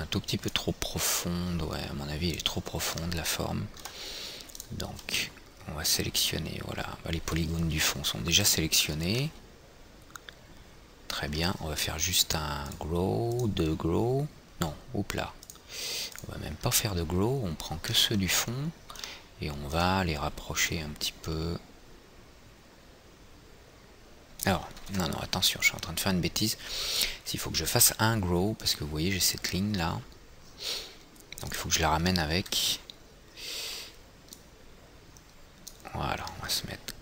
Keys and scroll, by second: 25.5 ctrl+z, 28.4 F4.